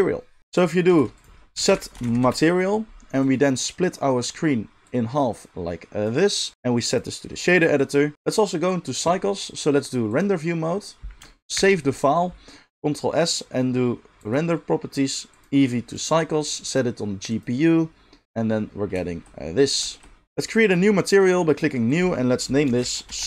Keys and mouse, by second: 0.4-4.8 shift+middle drag, 0.8 shift+a, 4.8-10.4 drag, 10.4-14.1 middle drag, 11.6 ctrl+s, 14.1 click, 14.4-15.3 middle drag, 15.3-19.3 drag, 19.3 middle click, 19.5 drag, 19.7-21.2 shift+middle drag, 20.2 click, 21.2-23.2 drag.